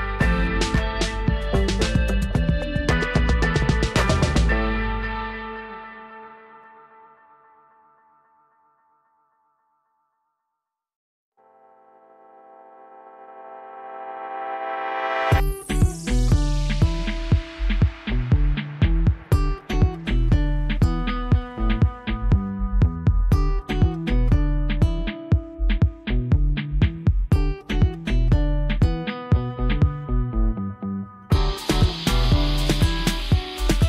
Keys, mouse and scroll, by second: 14.5-15.7 drag, 19.0-19.6 click, 20.6-22.8 drag, 23.3-24.6 drag, 25.7-27.2 drag.